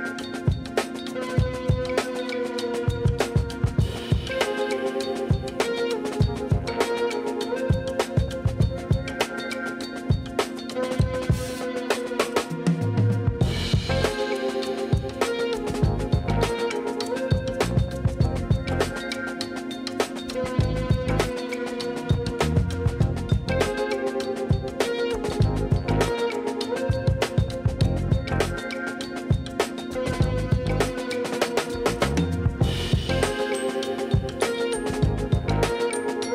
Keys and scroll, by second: 4.2 Tab, 6.0 3, 7.0 shift+s, 8.8 Tab, 12.0 shift+a, 15.9 r, 16.9 Return, 17.7 Tab, 18.2 ctrl+a, 20.2 shift+c, 20.5 o, 21.6-24.4 typing, 26.1 Tab.